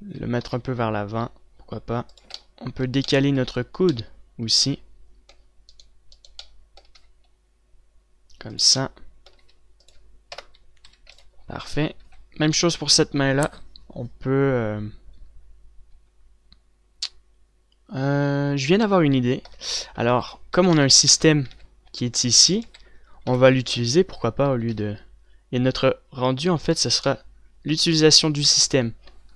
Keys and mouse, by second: 0.3 z, 0.7 g, 2.4 z, 3.5-5.6 drag, 5.8-7.1 right drag, 7.1 g, 8.8-10.3 drag, 9.6 g, 10.5 KP_0, 11.1 a, 11.4 ctrl+s, 12.3 z, 12.7 z, 19.8-21.8 typing, 22.9 click, 23.0-25.1 typing, 24.0-25.3 drag, 28.0 click, 28.9 KP_7.